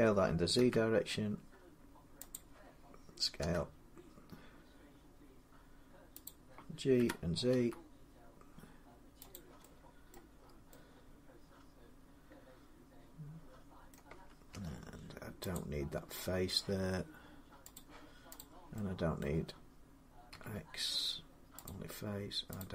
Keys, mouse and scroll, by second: 0.0-0.4 typing, 2.1 click, 3.2 s, 3.5 s, 6.1 click, 6.8-8.3 typing, 9.1 click, 9.9 middle click, 10.2 scroll, 11.1 scroll up 6, 11.1 typing, 13.7 middle click, 14.3 Tab, 15.3 click, 17.6 click, 18.2 click, 19.0 middle click, 20.1 x, 21.5 click, 22.4 click.